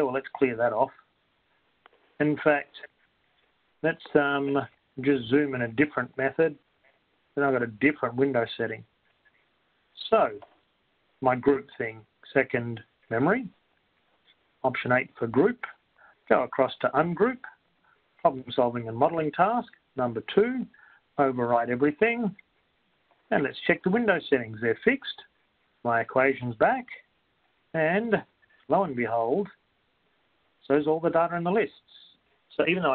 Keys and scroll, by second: 0.6 Up, 7.6 4, 15.3 8, 17.3 Right, 20.0 2, 22.3 3, 27.6-29.3 typing, 30.8 Return.